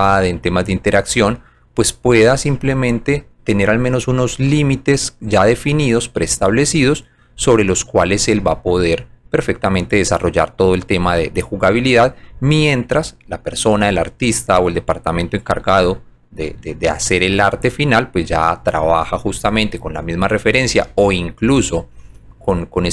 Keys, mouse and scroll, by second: 0.6 alt+click, 2.5 alt+middle click, 4.5 alt+click, 6.2 click, 7.6 alt+click, 8.5 alt+middle click, 10.0 alt+click, 11.3 alt+click, 12.2 alt+middle click, 13.8 alt+click, 15.8 alt+middle click, 17.2 alt+click, 18.5 alt+click, 19.0 alt+right click, 19.4 alt+middle click, 20.0 alt+right click, 21.1 alt+click, 22.5-22.9 drag.